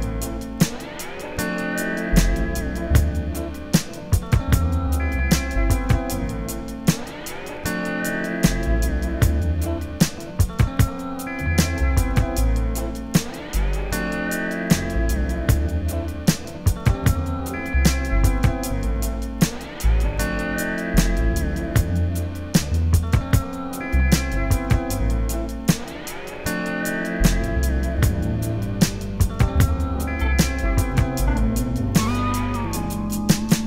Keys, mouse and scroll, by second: 1.2 click, 2.0 scroll down 1, 2.6-3.2 scroll up 1, 3.2 `, 4.0-4.8 scroll down 1, 4.8 Tab, 5.9 g, 6.7 click, 7.2 ctrl+r, 8.3 click, 8.6 scroll down 1, 8.8 KP_1, 9.0 scroll up 1, 10.4 g, 11.8-12.2 scroll down 1, 12.2 `, 13.3 `, 14.1 Tab, 14.4 alt+a, 14.6 `, 17.8 click, 18.4 alt+a, 19.2-19.8 scroll up 1, 19.8 click, 20.2 shift+click, 20.8 j, 23.1 click, 23.3 ctrl+r, 25.0 click, 25.4 alt+a, 25.6 scroll up 1, 25.8 scroll down 1, 26.0 2, 26.4 click, 26.5 ctrl+x, 26.7 1, 26.8 click, 27.0 shift+click, 28.0 alt+a, 28.2 2, 28.4 click, 29.0 ctrl+r, 29.8 scroll down 1, 30.6 ctrl+r, 32.7 scroll up 1, 33.2 scroll up 1, 33.5 scroll down 1.